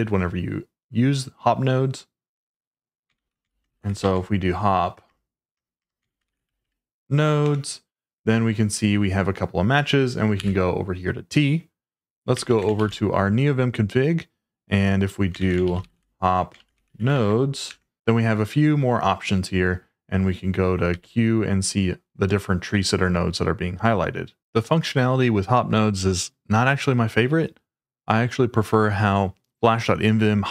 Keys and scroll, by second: 2.9-6.5 typing, 7.4 Return, 10.3 t, 12.5 ctrl+a, 12.7 shift+n, 15.1-17.6 typing, 17.6 Return, 20.9 q.